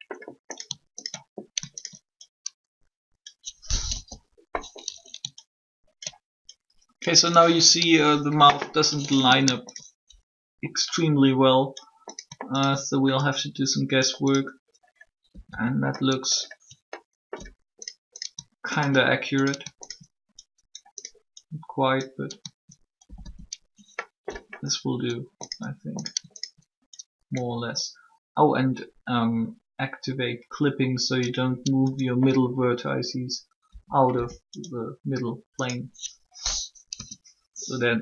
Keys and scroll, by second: 3.8 1, 15.2 typing, 33.4-34.1 typing, 36.7 3.